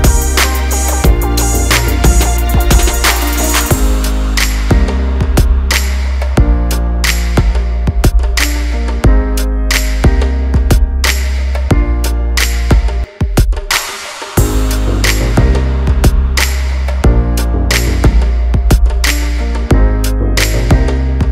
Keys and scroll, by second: 13.6 Return.